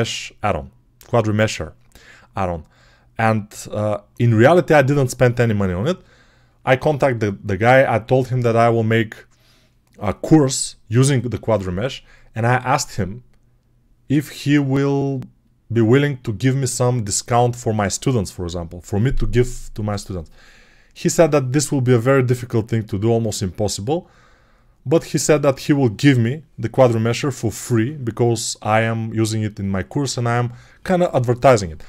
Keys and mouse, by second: 3.2 n.